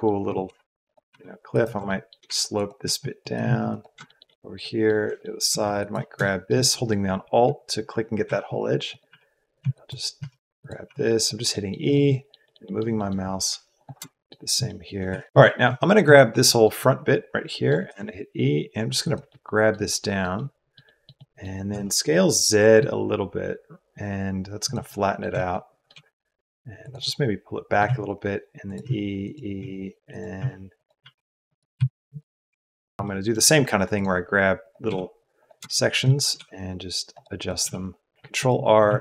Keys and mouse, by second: 21.3 click, 21.7 s, 25.3 shift+middle click, 25.9 g, 27.1 middle click, 27.8-32.4 typing, 33.0 shift+middle click.